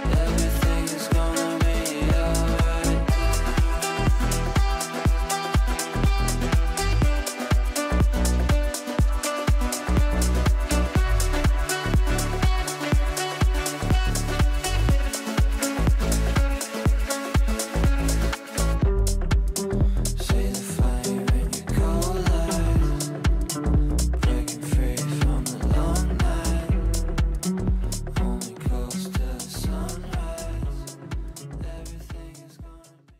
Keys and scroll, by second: 18.9 F9, 31.0 F9.